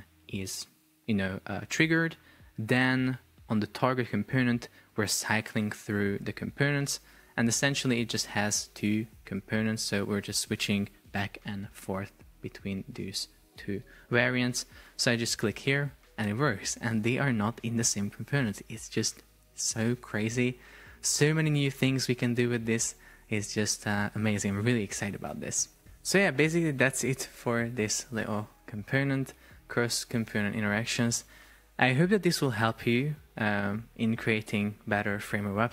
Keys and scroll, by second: 14.0 super+p.